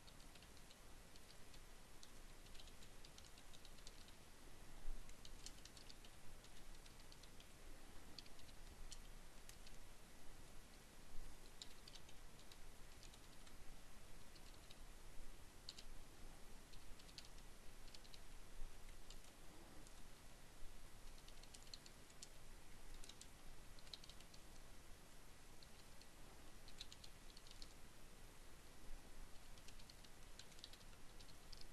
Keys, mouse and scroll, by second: 0.0-6.5 typing, 8.6 Return, 9.3 Tab, 10.0-14.8 typing, 16.2-17.6 typing, 18.8 Tab, 18.8-22.7 typing, 23.7-27.4 typing, 28.7-31.7 typing.